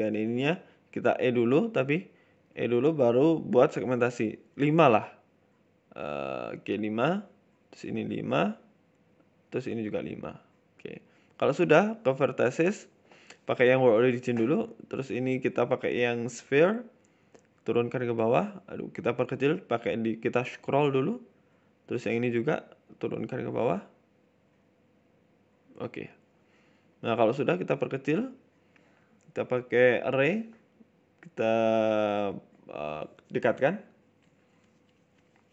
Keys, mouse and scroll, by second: 0.1 KP_7, 0.7 KP_3, 1.1 KP_1, 1.7 e, 3.7 shift+middle click, 3.9-4.2 scroll up 2, 4.2 Tab, 4.6 Tab, 5.4 ctrl+r, 7.6 ctrl+r, 9.1 middle click, 9.3 ctrl+r, 10.6 KP_1, 11.0 shift+middle click, 11.8 click, 12.1 click, 12.5 shift+s, 13.1-13.4 scroll up 2, 13.4 click, 13.6 shift+middle click, 14.1 click, 14.9 click, 15.1 click, 21.4 shift+middle click, 22.1 click, 22.3 shift+middle click, 22.9 g, 25.4 scroll down 4, 25.6 Tab, 25.7 middle click, 26.0-26.9 scroll down 2, 26.1 middle click, 26.9 s, 28.6 click, 30.1 middle click, 30.4 scroll up 2, 30.5 middle click, 31.2 click, 33.5 click, 34.9-35.5 scroll up 6, 35.1 middle click.